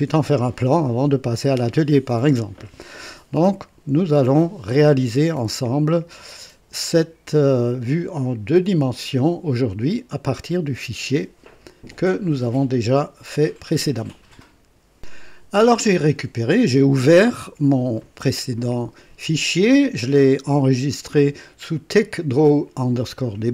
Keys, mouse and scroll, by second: 15.0 click.